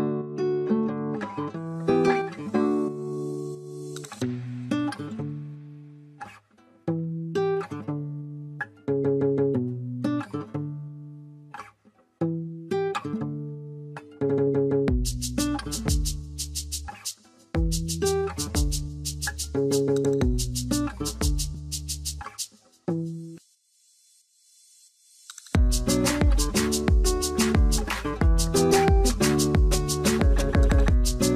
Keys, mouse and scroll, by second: 1.1 ctrl+click, 1.8 ctrl+click, 5.5 double click, 8.6 right click, 11.9 right click, 12.2 alt+middle click, 13.3 scroll up 2, 19.9 double click, 22.3 double click.